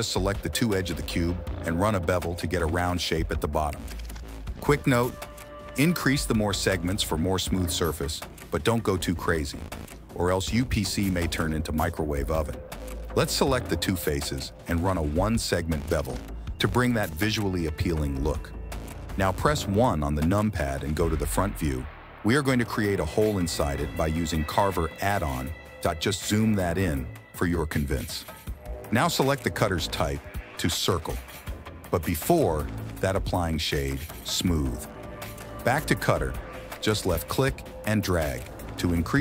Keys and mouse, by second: 1.0 Tab, 3.6 click, 4.8 click, 5.6 shift+click, 6.7 KP_1, 7.4 ctrl+b, 12.8 alt+click, 13.5 alt+shift+click, 14.7 ctrl+b, 18.2 click, 20.4 KP_3, 20.8 KP_1, 22.0 KP_3, 22.8 ctrl+KP_3, 23.7 ctrl+KP_1, 25.2 KP_1, 30.0 Tab, 30.3 ctrl+shift+x, 31.2 click, 32.4 ctrl+shift+x.